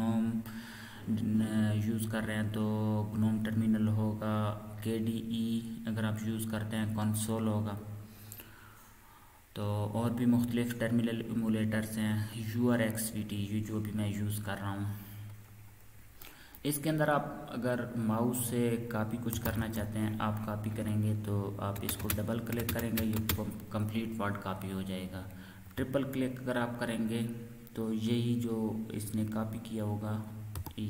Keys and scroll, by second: 19.1-19.9 typing, 30.5 shift+Insert.